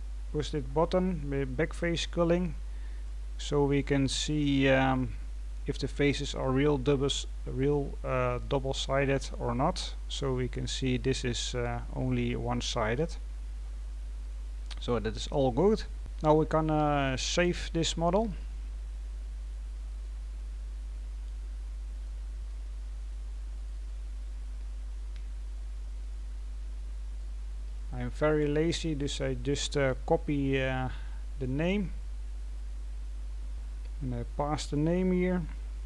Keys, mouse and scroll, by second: 3.0-14.5 middle drag, 14.5-15.0 scroll down 2, 15.0-35.8 middle drag.